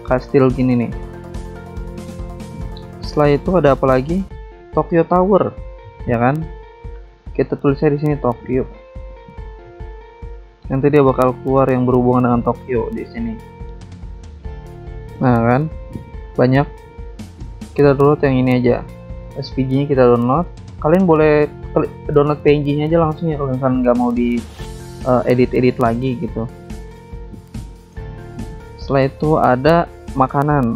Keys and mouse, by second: 2.2 click, 2.3 click, 2.9 click, 3.2 alt+Tab, 5.3 click, 6.4 alt+Tab, 7.5 click, 8.4 click, 8.9-9.8 typing, 16.1 click, 17.6 click, 17.7 click, 19.7 click, 19.9 click, 21.3 click, 21.5 click, 27.5 click, 28.3 click, 29.0 alt+Tab, 30.5 click.